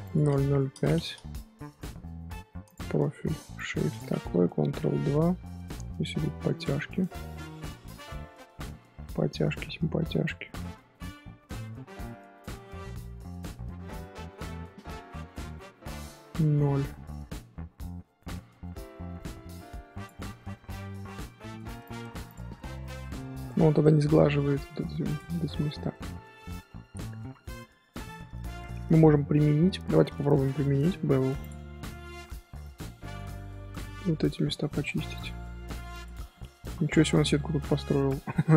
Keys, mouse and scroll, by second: 0.0-4.4 drag, 4.4 ctrl+2, 5.4-5.7 scroll up 2, 5.7 Tab, 6.1 middle click, 6.9-7.4 scroll down 2, 7.4-9.0 middle drag, 9.0 Tab, 9.3 middle click, 10.2-13.2 drag, 20.4-21.4 middle drag, 21.4-22.2 right drag, 22.2 click, 22.5-23.5 middle drag, 23.5 scroll up 1, 24.2 scroll down 1, 24.6-25.0 shift+middle drag, 25.0 click, 25.4-27.4 middle drag, 27.4-27.9 scroll up 1, 27.9-31.4 middle drag, 31.4-33.1 drag, 33.1 scroll up 2, 33.4 Tab, 33.8 middle click, 34.3 2, 34.4-35.1 middle drag, 35.1 alt+click, 35.9 alt+shift+click, 36.3-38.4 middle drag, 38.4 Tab.